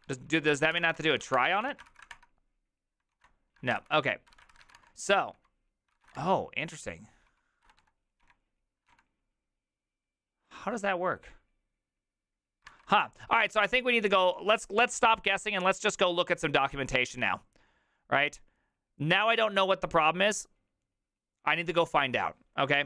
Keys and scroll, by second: 0.0-8.9 typing, 3.1 ctrl+a, 5.9 ctrl+c, 6.1 Return, 12.7 alt++.